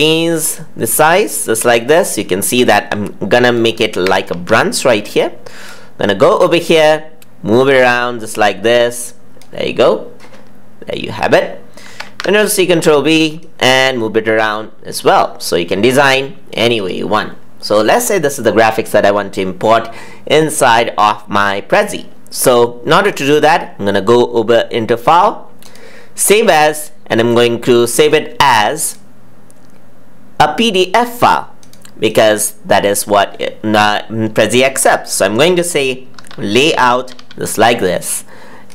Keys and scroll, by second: 3.9 ctrl+c, 4.2 ctrl+v, 11.8 ctrl+c, 12.0 ctrl+v.